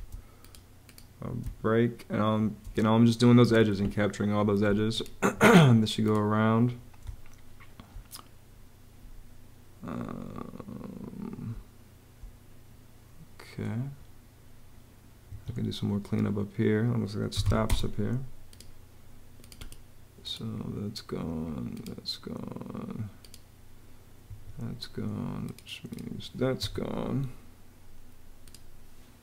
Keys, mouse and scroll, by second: 1.2 space, 4.6 Escape, 6.9 space, 11.3 space, 15.2 Home, 16.9-17.8 typing, 18.5 click, 24.1 Escape, 26.4 BackSpace, 29.0 BackSpace.